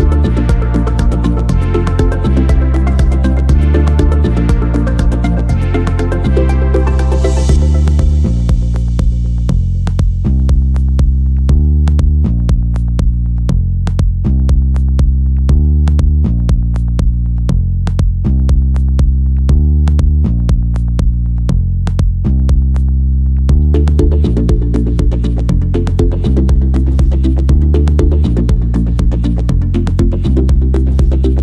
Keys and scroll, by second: 0.2 s, 7.4 m, 10.1 r, 14.7 m.